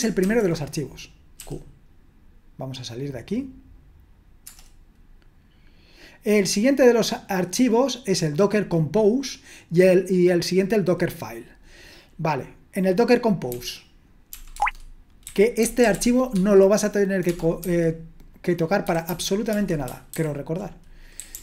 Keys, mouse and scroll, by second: 1.2-1.9 typing, 4.4 Return, 13.5-21.4 typing, 14.5 Tab, 20.1 ctrl+a, 20.1 ctrl+s.